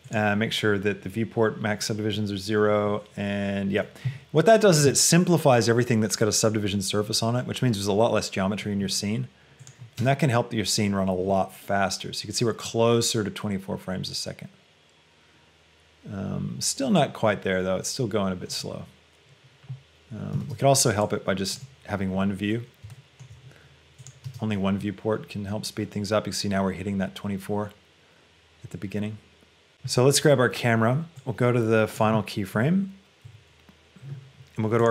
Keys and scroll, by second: 10.0 space, 20.6 space, 24.3 shift+space, 32.8 Down, 33.5 Up.